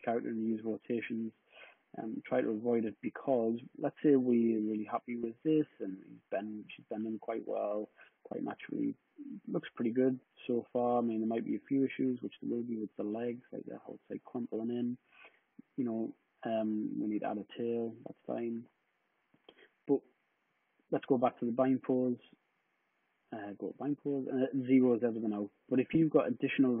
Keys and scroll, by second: 16.9 super+z.